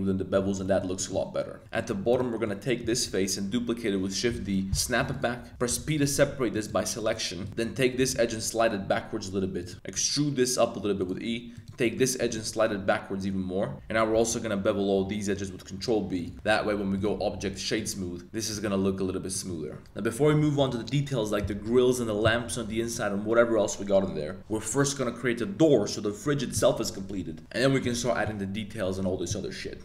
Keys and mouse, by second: 0.6 shift+Tab, 0.6 shift+middle click, 0.9 middle drag, 1.6 shift+middle click, 1.9 3, 2.1 click, 2.3 middle click, 2.9 shift+d, 4.4 click, 5.5 super+z, 5.7 p, 6.3 Tab, 6.5 click, 7.0 click, 7.5 2, 7.6 middle click, 7.6 z, 7.9 g, 8.1 g, 9.6 click, 9.7 z, 9.9 e, 11.0 click, 11.3 2, 11.5 click, 11.8 middle click, 12.2 g, 12.3 g, 13.7 z, 14.1 super+b, 16.1 click, 16.3 Tab, 17.0 click, 18.5 a, 19.3 middle drag, 19.8-21.4 middle drag, 22.5-22.9 middle drag.